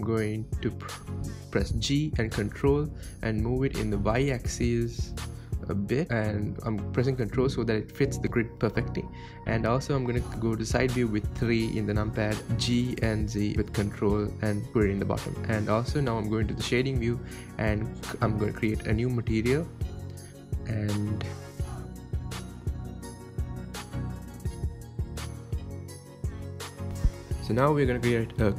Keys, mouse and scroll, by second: 0.6 g, 4.9 n, 6.7 n, 7.5-8.5 middle drag, 8.5 g, 9.0 g, 12.1 scroll down 3, 12.5-13.1 middle drag, 13.1 scroll down 3, 13.3 scroll up 1, 13.5 scroll down 1, 13.6-15.9 middle drag, 15.9 click, 16.6 right click, 17.5-18.5 shift+middle drag, 18.5 click, 19.1-19.5 scroll down 2, 19.5-20.6 middle drag, 20.6 drag, 26.1 click, 26.9 click.